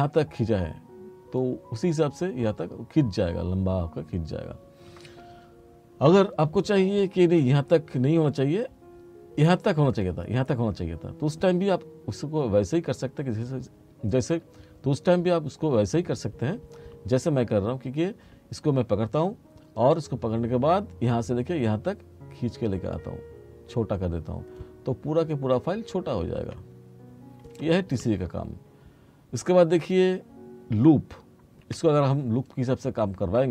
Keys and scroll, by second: 31.7 F4.